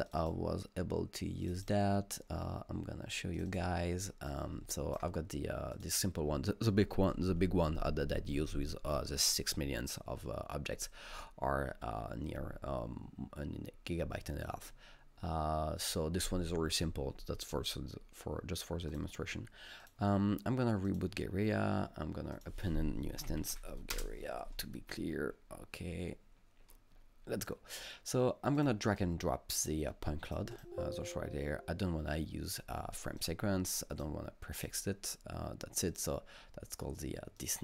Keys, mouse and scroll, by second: 0.1 click, 0.2 double click, 1.5 click, 1.6 double click, 3.4 click, 3.5 double click, 4.3-8.4 drag, 18.9 click, 19.0 click, 19.8 click, 20.9 click, 22.4 click, 23.0-24.0 typing, 28.4-29.1 typing, 28.6 click, 30.0 click, 33.2 click, 33.9 click, 34.6 click, 35.9 click, 37.4 click.